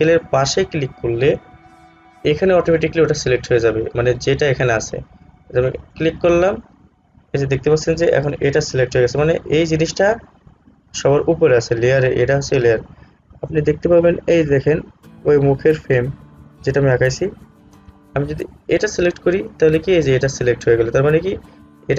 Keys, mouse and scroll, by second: 5.9 click, 18.8 click.